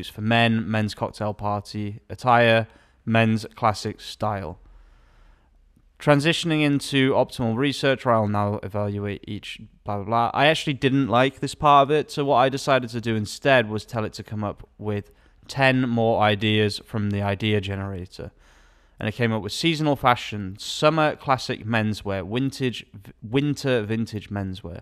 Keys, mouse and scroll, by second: 15.0 alt+a, 21.3 alt+a.